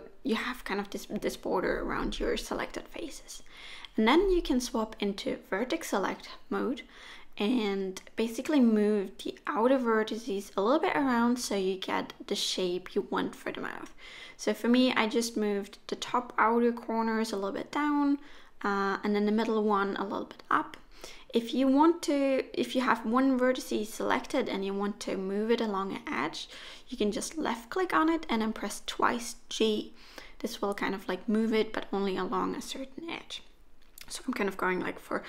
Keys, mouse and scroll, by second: 1.1 middle click, 2.4 middle click, 4.1 2, 4.3 click, 5.0 shift+click, 8.9 1, 9.7 click, 10.5 g, 12.1 click, 12.5 g, 14.7 g, 16.7 click, 16.9 g, 19.0 click, 19.4 g, 23.1 click, 23.4 g, 24.5 click, 25.3 g, 27.2 click, 27.5 g, 29.1 middle click, 30.2 3, 30.7 click, 31.1 shift+click, 31.4 middle click, 35.0 middle click.